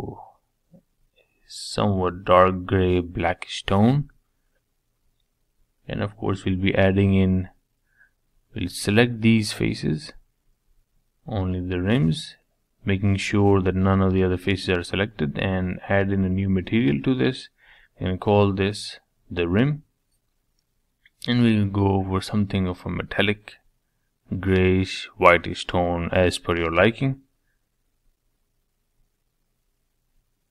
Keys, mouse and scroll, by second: 4.0 click, 6.0 Tab, 6.9-9.0 middle drag, 9.0 click, 10.0-12.1 middle drag, 12.1 shift+click, 12.7 shift+click, 13.0-14.4 middle drag, 14.4-18.2 drag, 20.2 click, 21.2-26.1 drag, 27.4-29.6 drag, 29.6 Tab.